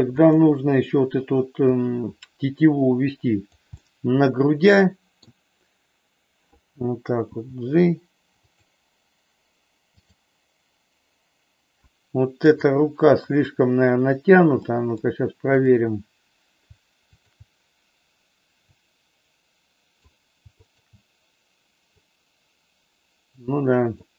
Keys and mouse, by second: 0.2 click, 1.6-3.5 drag, 3.7-5.2 middle drag, 7.4 g, 8.5 click, 10.0 click, 12.5 click, 14.6 middle click, 17.1 shift+click, 18.6-20.0 drag, 20.6 shift+click, 22.0-24.0 drag.